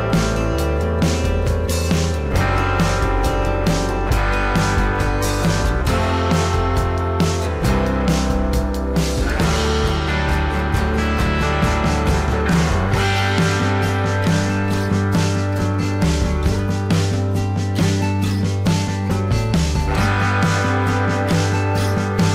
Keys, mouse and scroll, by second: 1.8 ctrl+d, 3.0 space, 14.0 alt+scroll down 1.